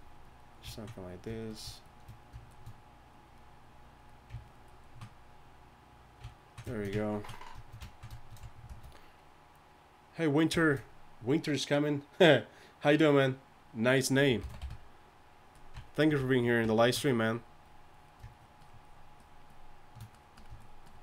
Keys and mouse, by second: 4.2 click, 8.7 shift+c, 14.4 shift+c, 14.6 d, 14.6 f, 17.3 click.